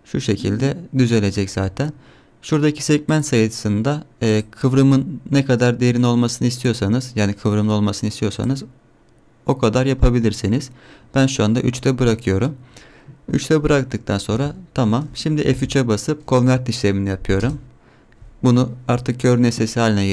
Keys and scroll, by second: 14.3 Tab, 15.7 F3.